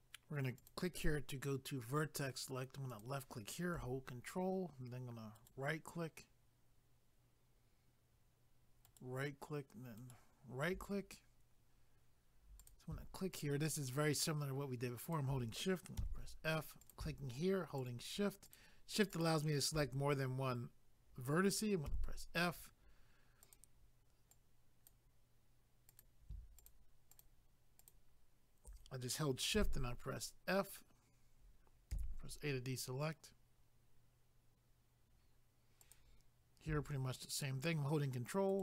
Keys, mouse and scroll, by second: 0.6 click, 2.9 click, 5.4 ctrl+right click, 8.8 ctrl+right click, 12.6 click, 13.3 shift+click, 14.0 shift+double click, 15.1 shift+click, 16.8 click, 17.8 shift+click, 18.5 shift+click, 19.1 shift+click, 23.4 click, 24.3 click, 25.9 click, 26.6 shift+click, 27.1 shift+click, 29.6 f, 35.8 click, 38.5 ctrl+right click.